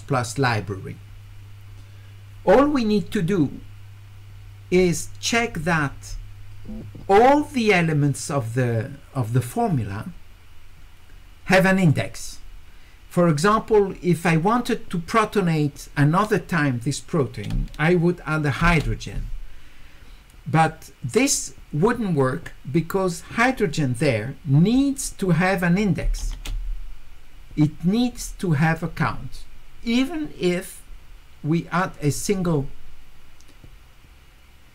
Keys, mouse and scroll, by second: 11.8 click.